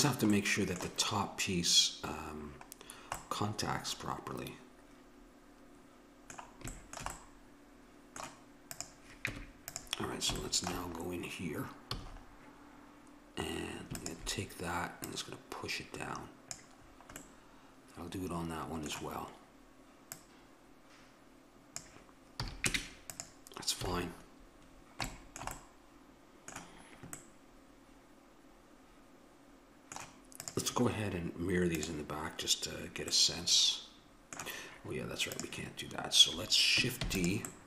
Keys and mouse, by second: 0.3-4.9 middle drag, 7.2-8.8 middle drag, 8.8-10.4 drag, 9.2 Tab, 10.4 middle click, 11.9 a, 14.0-17.0 drag, 17.0-19.0 middle drag, 20.1-22.0 drag, 22.4 a, 22.7 Tab, 23.8 a, 30.5-33.6 drag, 34.2-35.3 middle drag, 35.3-37.1 drag, 37.1 shift+d.